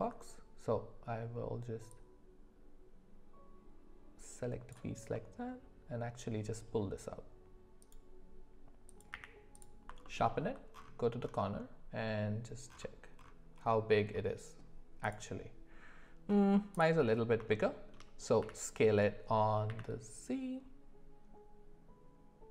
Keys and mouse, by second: 1.9-8.0 drag, 5.2-8.0 middle drag, 8.9 click, 9.1 q, 10.0 alt+middle click, 10.3 alt+middle click, 17.5-17.9 shift+middle drag, 18.4 s.